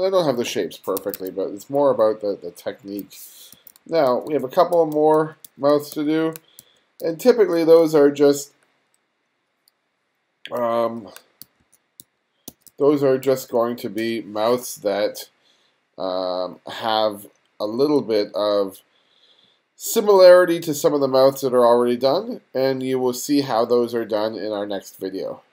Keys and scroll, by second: 1.0 1, 2.9 1, 3.6 f, 4.8 g, 5.9 f, 7.3 g, 10.6 g, 11.5 f, 12.5 g, 13.3 f.